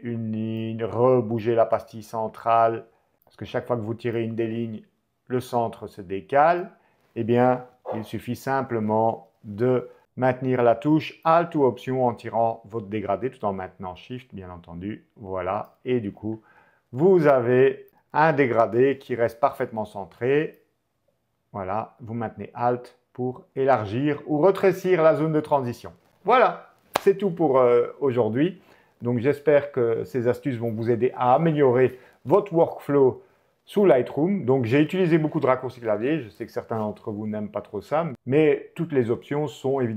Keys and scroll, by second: 7.6 BackSpace, 9.2 m, 10.5 alt+m, 17.9 h, 19.6 alt+h.